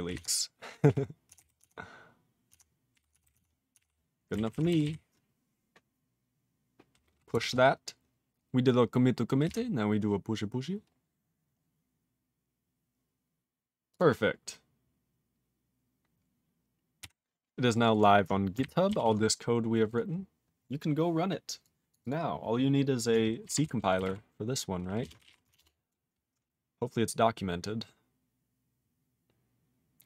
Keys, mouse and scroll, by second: 4.5 w, 17.0 q, 17.7 click, 17.8 click, 17.9 right click, 18.6 ctrl+g, 19.0 ctrl+s, 19.2 scroll down 4, 19.9 click, 20.4 click, 21.6 click, 21.9 click, 22.0 click, 22.0 click, 22.5 click, 23.6 ctrl+s.